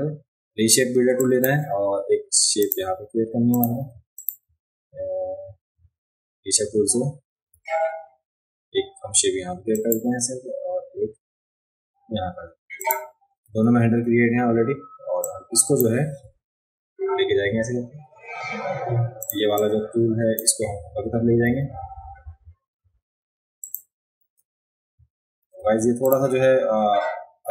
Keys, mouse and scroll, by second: 1.2 click, 2.6 click, 3.5 click, 4.1 ctrl+click, 6.8-7.3 alt+scroll up 1, 7.7 alt+scroll down 1, 9.7 click, 12.8 click, 13.6 a, 15.2-15.8 drag, 19.2 click, 19.6-20.3 drag, 23.6 click, 26.0 click.